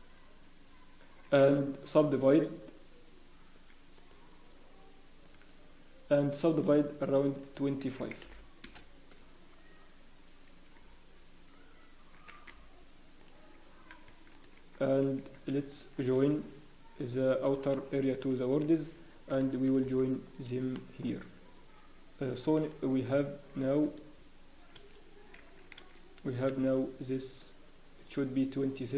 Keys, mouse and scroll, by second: 6.7 right click, 6.7 click, 11.2 t, 12.6 t, 13.2 click, 14.0 Tab, 14.3 click, 14.5 Tab, 14.9 scroll up 1, 15.1 Tab, 15.7 shift+click, 17.5 click, 18.0 shift+click, 19.3 ctrl+j, 19.7 Tab, 20.2-21.1 scroll up 4, 20.7 shift+middle click, 21.5 scroll down 1, 21.9-22.4 scroll up 1, 22.6 alt+click, 23.1 click, 23.1-23.4 scroll down 2, 23.8 alt+click, 24.5 scroll down 1, 24.7 a, 24.9-25.2 scroll up 1, 25.2 scroll down 2, 25.7 alt+a, 26.2 scroll down 1, 26.5 b.